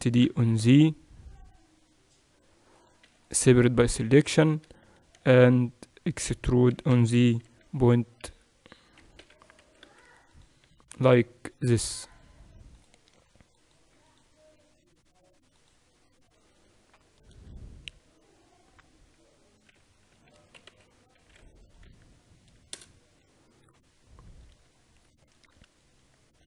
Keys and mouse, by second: 0.0 shift+d, 3.1 p, 3.9 Tab, 4.2-8.2 right drag, 4.6 Tab, 5.2 a, 6.6 e, 9.0 g, 16.4-19.7 middle drag, 19.7 g, 23.7-25.0 middle drag.